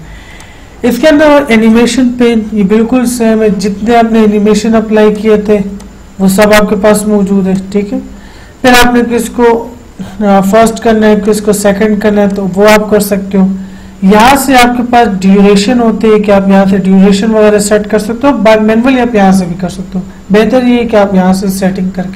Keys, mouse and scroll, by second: 4.9 click, 11.5 click.